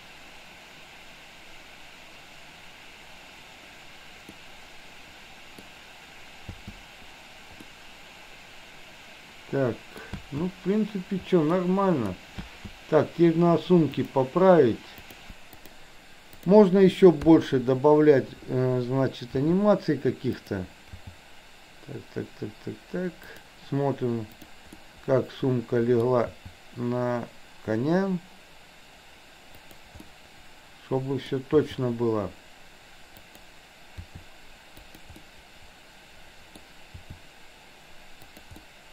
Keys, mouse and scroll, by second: 4.3-5.6 middle drag, 6.5 space, 7.8-10.1 middle drag, 10.3 space, 11.6 middle click, 12.5 space, 15.1-15.8 drag, 17.3 KP_3, 19.4 r, 20.9 g, 24.9-26.1 middle drag, 26.3 g, 30.0-31.4 middle drag, 31.4 scroll down 1, 31.6 g, 34.0 r, 35.3-36.6 middle drag, 37.0 r, 38.6-38.9 middle drag.